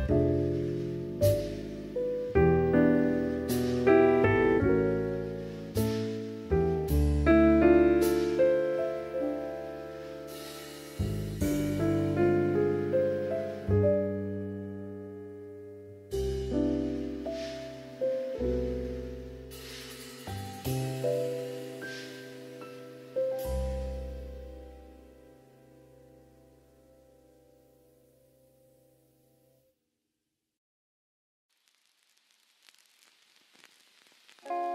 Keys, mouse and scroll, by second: 0.8 alt+z, 0.8-2.3 middle drag, 2.5 Tab, 2.5-3.2 drag, 3.3 ctrl+s, 3.8 click, 6.0 click, 8.1 click, 8.8 click, 10.1-10.7 drag, 10.7-12.3 middle drag, 12.7 click, 13.0 Tab, 13.5 alt+z, 14.0 click, 14.6 click, 14.8 click, 15.6 click, 16.3 click, 17.0-18.4 drag, 18.4 Tab, 18.8 middle drag, 19.1 alt+z, 19.6-20.7 middle drag, 21.3 Tab, 21.7 middle click, 22.1 alt+z, 22.4 click, 23.0 click, 24.1 click, 24.7 middle click, 25.4 click, 27.5 click, 28.1-30.7 drag, 30.7 Tab, 31.1 middle drag, 31.3 alt+z, 31.7-32.1 middle drag, 32.5-34.0 middle drag.